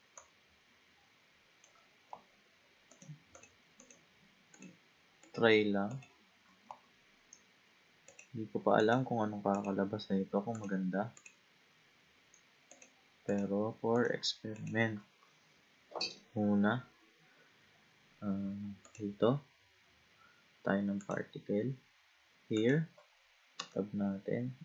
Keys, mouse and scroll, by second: 0.2 shift+click, 2.9 shift+click, 3.4 shift+click, 3.8 shift+click, 4.5 shift+click, 5.2 shift+click, 5.9 shift+click, 8.1 shift+click, 8.8 shift+click, 9.5 shift+click, 10.6 shift+click, 11.2 shift+click, 12.7 shift+click, 13.3 shift+click, 13.9 shift+click, 14.6 shift+click, 18.9 click, 21.0-22.7 drag, 23.7 Tab.